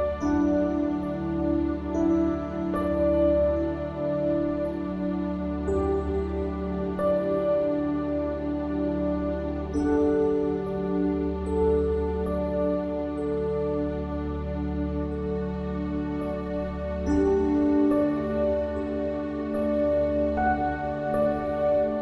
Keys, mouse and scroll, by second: 0.5-2.4 drag, 2.7-4.5 right drag, 4.5 middle click, 5.9-9.0 drag, 9.0 ctrl+g, 10.0-12.0 drag, 14.8 shift+d, 15.5-17.0 drag, 20.2 shift+d, 21.9-22.0 drag.